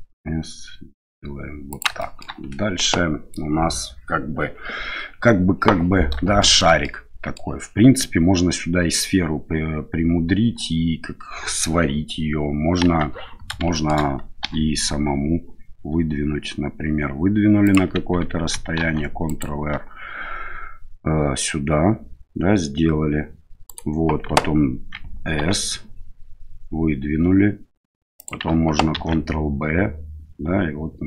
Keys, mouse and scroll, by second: 2.0 middle click, 6.4 shift+middle click, 6.8 middle click, 12.8 KP_1, 13.8 shift+middle click, 14.4 e, 18.8 ctrl+r, 25.4 s, 28.9 ctrl+b.